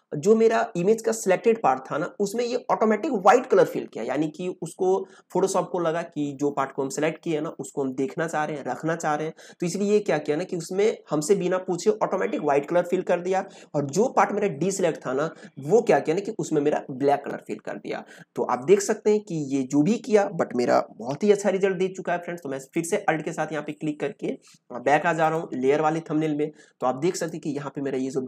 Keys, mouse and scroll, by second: 22.5 alt+click.